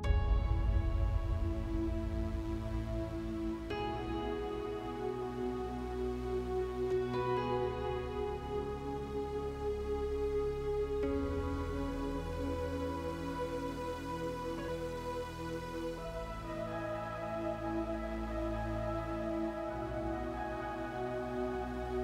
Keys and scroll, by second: 2.5 space.